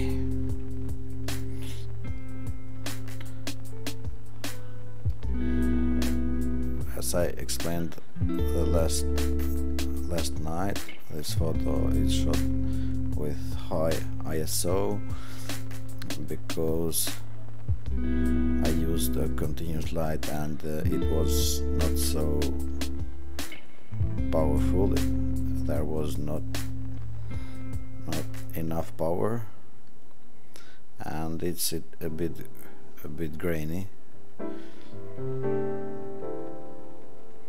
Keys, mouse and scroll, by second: 4.0-5.0 middle drag, 4.0-4.6 scroll up 10.